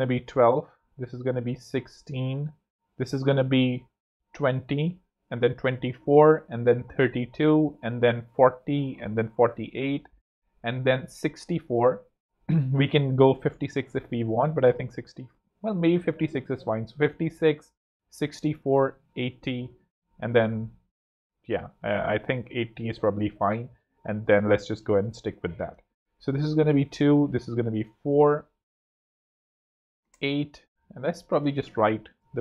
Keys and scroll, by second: 2.4 super+d, 4.7 super+d, 6.2 super+d, 7.5 super+d, 8.9 super+d, 10.9 super+d, 17.4 super+d, 25.0 super+z, 27.0 4, 27.2 Tab, 29.7 8, 29.9 KP_Enter, 30.5 super+KP_Enter, 31.8 super+8, 32.0 p.